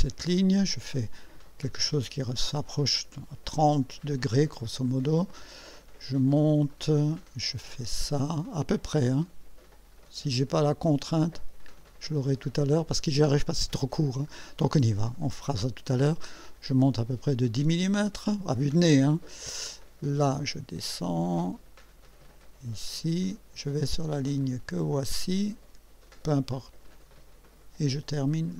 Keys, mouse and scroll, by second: 4.5 click, 6.7 click, 14.3 click, 17.9 click, 20.2 click, 23.2 click, 26.0 click.